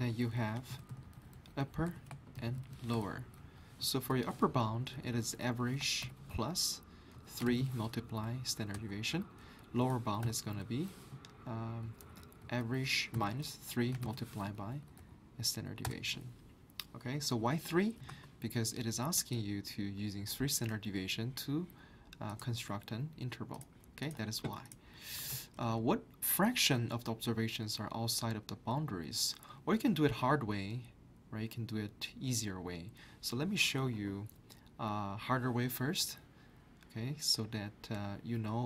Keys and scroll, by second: 0.9-4.1 typing, 1.9 Return, 7.1 3, 7.4 *, 8.1 Up, 8.2 Up, 8.7 Return, 9.6 Up, 11.8 Up, 12.0 Up, 13.1 Up, 13.7 3, 14.0 *, 14.6 Up, 14.8 Up, 15.0 Up, 15.8 Return, 18.1 alt+Tab, 25.2 alt+Tab.